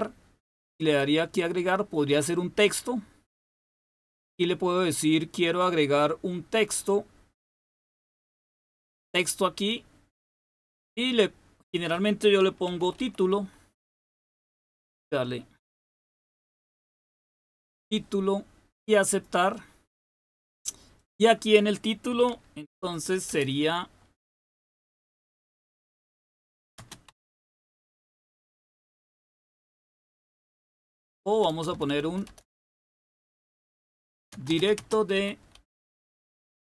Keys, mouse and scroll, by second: 0.6 click, 9.1 click, 10.8-12.6 drag, 12.4-13.4 typing, 15.4-17.6 typing, 19.0 click, 20.9-22.7 drag, 22.7-23.3 typing, 25.0 Caps_Lock, 25.8-29.1 typing, 30.6-36.7 typing.